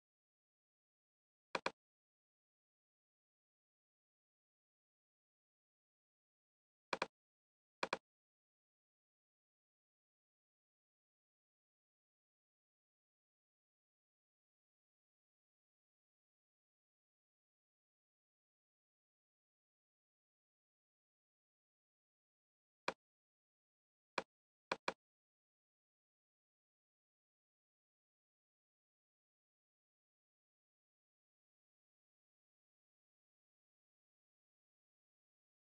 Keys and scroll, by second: 2.8 alt+`, 5.3 alt+`, 14.1 alt+`, 21.3 alt+`, 25.6 Return, 26.2-31.2 typing, 32.4-33.4 typing, 34.9-35.6 typing.